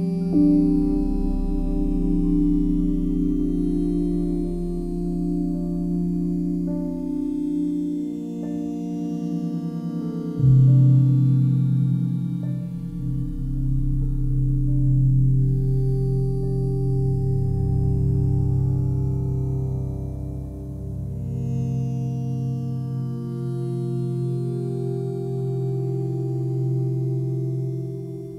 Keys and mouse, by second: 0.6 alt+shift+click, 1.0 ctrl+alt+click, 1.8-5.6 drag, 5.8 typing, 7.0 Return, 7.9-10.3 alt+shift+drag, 10.5 alt+shift+click, 11.3-13.6 alt+drag, 11.3 typing, 13.8 typing, 19.0 click, 21.3 ctrl+alt+click, 22.4 alt+click, 23.5 ctrl+alt+click, 24.0 alt+shift+click, 25.0 ctrl+alt+click, 26.4-28.3 alt+drag.